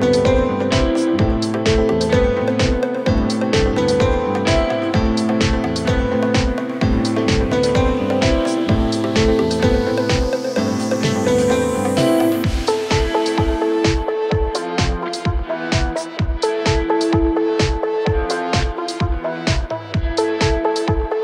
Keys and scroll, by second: 0.2 Return, 0.8-1.5 typing, 3.3-9.3 typing, 19.8 Return, 20.5-21.2 typing.